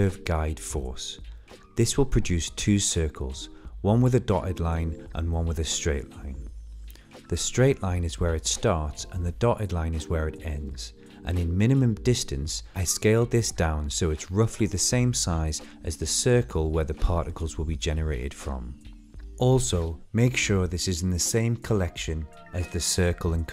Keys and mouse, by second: 8.3 click, 11.3-13.0 drag, 16.1-19.2 shift+drag, 19.8-20.6 middle drag, 20.9 shift+middle click, 22.1-22.9 middle drag, 23.2 shift+middle click.